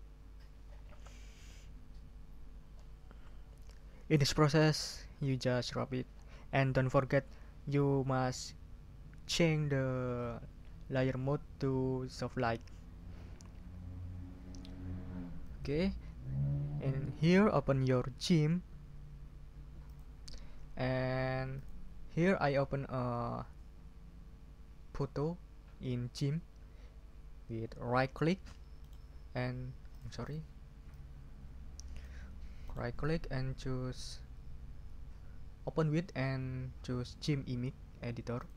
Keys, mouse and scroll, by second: 15.4 click, 19.8 click, 21.5 click, 28.8 right click, 29.9 click, 30.3 click, 30.9-31.5 scroll up 6, 30.9 click, 31.2 click, 31.5 click, 32.6 right click, 38.4 click.